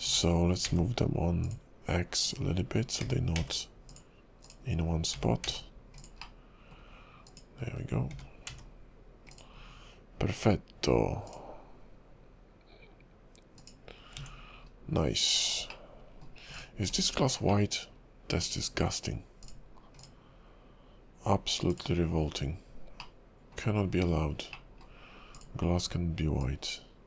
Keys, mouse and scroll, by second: 1.4 g, 2.2 click, 3.0 g, 4.5 click, 5.1 g, 6.2 middle click, 7.3 click, 8.1 g, 9.5-10.2 scroll down 2, 11.3 click, 13.7 click, 14.2 Tab, 14.8-15.9 scroll down 7, 15.9 middle click, 16.6 click, 16.9 /, 17.6 middle click.